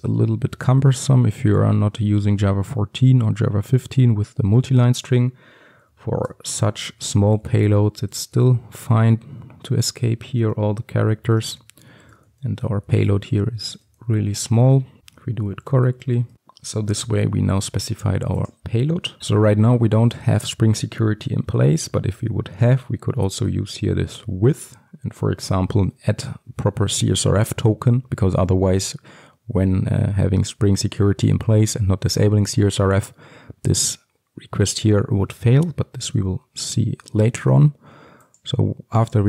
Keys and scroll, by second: 36.3 ctrl+x, 38.2 ctrl+x.